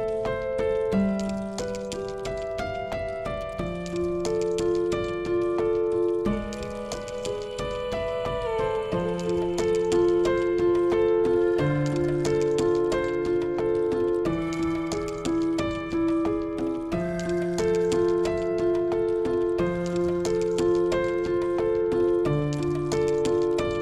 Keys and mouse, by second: 0.0 click, 0.4 shift+click, 1.2-4.4 drag, 5.0-5.8 right drag, 6.7 right click, 11.1-14.7 right drag, 15.1-16.9 right drag, 19.4 right click, 20.3 middle click, 21.7 ctrl+z, 23.1 click.